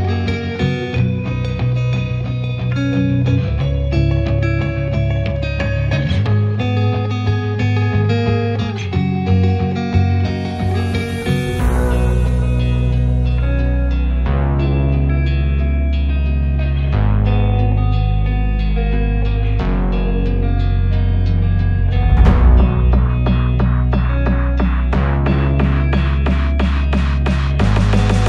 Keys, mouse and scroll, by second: 0.5 shift+click, 0.8 KP_0, 1.3 g, 3.4 r, 4.0-5.5 scroll down 1, 8.0-9.5 shift+middle drag, 11.5 scroll up 2, 11.8 shift+middle drag, 12.0 shift+right click, 12.3 shift+a, 13.7 s, 15.6 scroll up 4, 15.8 s, 16.2 Tab, 16.5 1, 16.7 f, 17.8 Tab, 18.3 click, 19.1 ctrl+2, 19.4 Tab, 19.7 ctrl+r, 20.6 ctrl+r, 21.2 Tab, 21.8-22.8 right drag, 22.8 Tab, 23.1 3, 23.2 click, 23.7 click, 25.2 shift+middle drag, 25.4 scroll up 2, 26.1 e, 27.2 ctrl+z, 27.7 shift+d, 28.0 p.